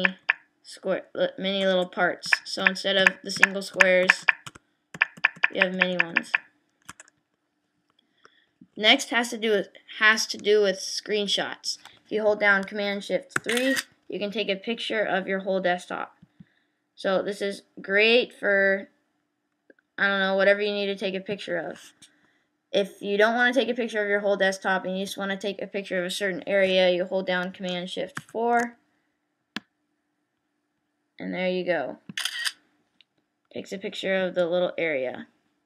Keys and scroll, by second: 13.4 shift+super+3, 28.2 shift+super+4.